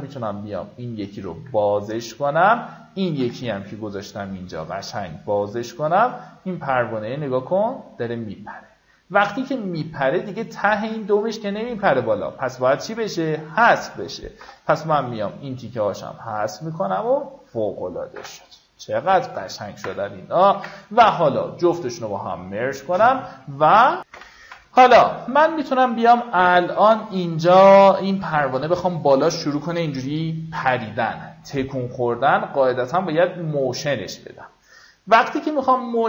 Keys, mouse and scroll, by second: 2.8 ctrl+click, 4.5-9.9 drag, 14.8 b, 15.4-17.9 drag, 18.5 v, 20.9 ctrl+e, 24.6 F9, 27.1 click.